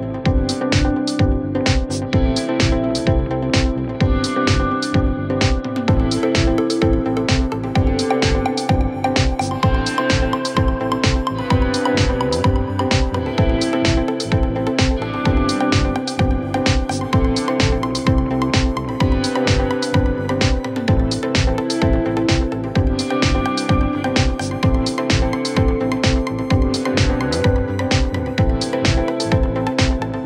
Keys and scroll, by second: 1.7 Escape, 3.9 Delete, 7.7 ctrl+z, 10.9 shift+Page_Down, 11.5 Escape, 13.4 shift+Page_Down, 14.3 Escape, 18.2 ctrl+z, 19.7 shift+Page_Up, 21.9 Escape, 23.7 Delete.